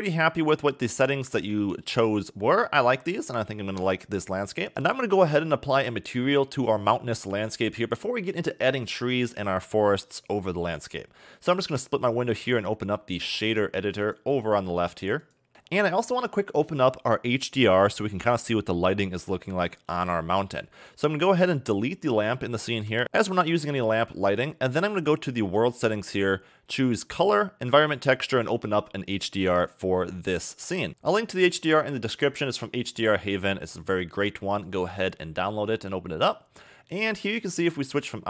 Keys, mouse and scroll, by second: 4.7-5.5 scroll down 1, 5.5-8.6 middle drag, 9.9-10.7 scroll down 2, 11.8 click, 13.2 click, 14.3 click, 15.5-17.5 scroll up 4, 21.4 click, 22.9 x, 25.5 click, 27.0 click, 30.3 click, 37.9 click.